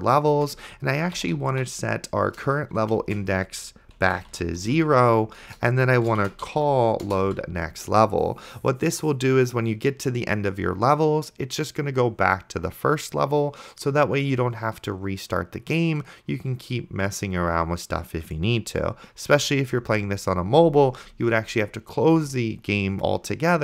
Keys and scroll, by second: 0.6 Return, 0.8-2.0 typing, 2.4 Return, 3.0-5.1 typing, 5.5 Return, 6.2-7.3 typing.